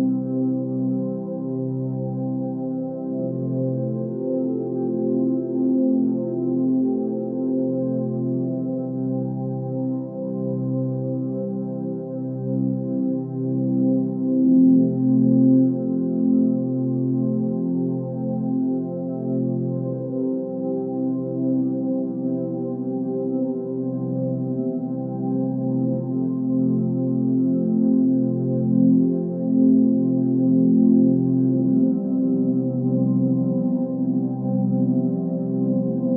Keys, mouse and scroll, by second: 0.2-1.9 typing, 4.6 ctrl+space, 6.3 b, 7.3 x.